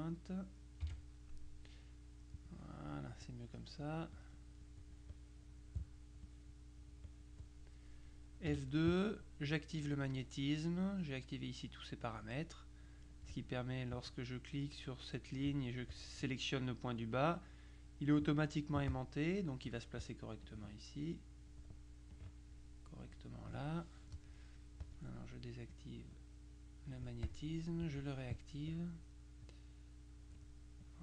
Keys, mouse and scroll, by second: 0.9 F6, 2.4-3.5 drag, 4.2-5.3 drag, 6.3-7.8 drag, 8.6 F2, 9.9 click, 14.0 click, 16.0 click, 17.2-18.7 drag, 19.0 click, 20.1 click, 22.2 click, 24.9 click, 25.8-28.5 drag, 28.8 click, 29.6 click, 30.9-31.0 drag.